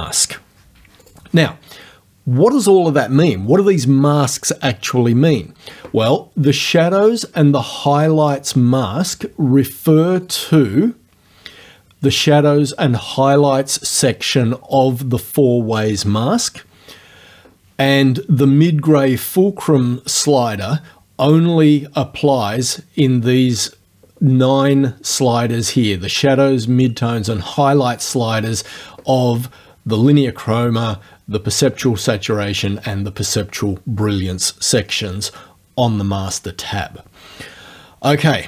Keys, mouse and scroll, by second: 1.1 click, 10.3 click, 21.3 click, 21.7 click.